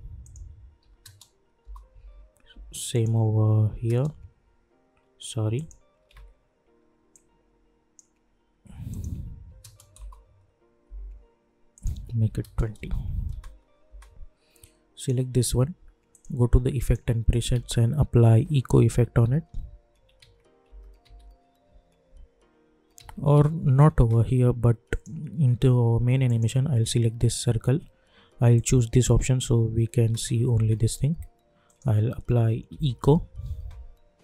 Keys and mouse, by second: 1.6 Return, 1.9 k, 2.5 k, 2.9 click, 5.5 click, 6.1 ctrl+z, 7.1-8.9 drag, 9.9 Return, 10.8 k, 11.7 click, 12.7 Return, 13.3 space, 15.0 click, 17.3 click, 17.5 ctrl+a, 18.1-21.5 typing, 20.1 ctrl+a, 22.9 ctrl+a, 24.9 click, 28.5 click, 29.9 space, 31.6 click, 32.3-33.2 typing.